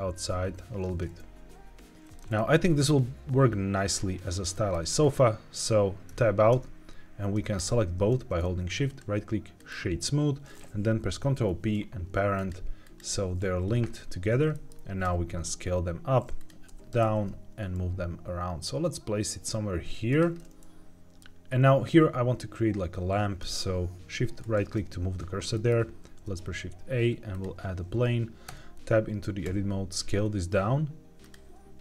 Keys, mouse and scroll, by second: 1.9 click, 2.1-3.9 middle drag, 3.9-4.4 scroll down 2, 4.4 middle click, 4.9 scroll up 1, 6.4 Tab, 7.5 shift+click, 8.8-9.6 right drag, 11.2 ctrl+p, 12.7 click, 13.4 g, 13.8 Escape, 14.4 middle click, 15.0 s, 16.3 click, 16.6 g, 16.9 shift+z, 20.0 click, 20.3 middle click, 24.4-25.5 shift+right drag, 25.5 middle click, 26.0 shift+a, 28.4 Tab, 31.1 click.